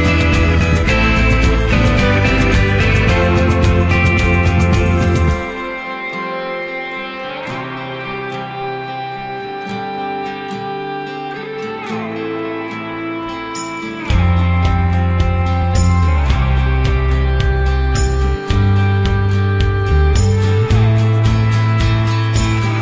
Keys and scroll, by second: 1.6 ctrl+0, 11.0 ctrl+z, 18.2 ctrl+z.